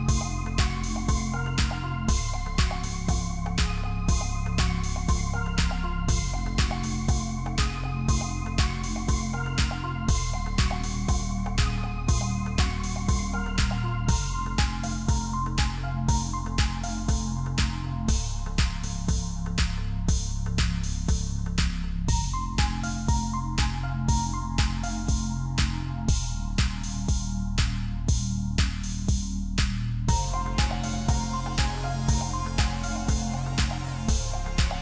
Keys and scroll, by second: 10.4 ctrl+alt+shift+d, 11.0 ctrl+d.